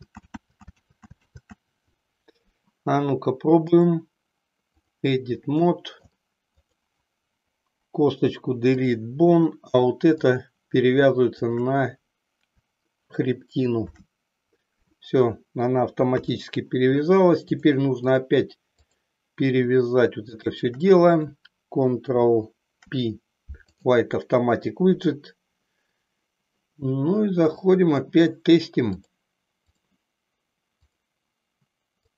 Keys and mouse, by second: 1.0 ctrl+z, 3.6-5.1 drag, 5.6 middle click, 6.6 click, 8.1 Delete, 10.1 click, 11.5 shift+click, 13.7 ctrl+p, 16.0 KP_3, 17.4 click, 18.9 click, 20.2 shift+click, 22.1 ctrl+p, 28.9 click, 32.0-32.1 drag.